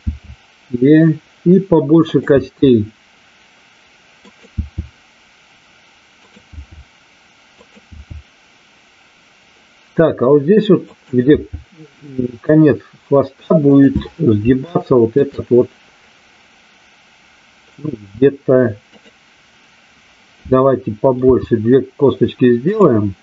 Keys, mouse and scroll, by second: 0.1 e, 2.1 click, 2.3 e, 4.2 click, 6.2 click, 7.5 click, 10.8 click, 11.3 e, 14.7 shift+middle click, 21.2 g, 22.5 click.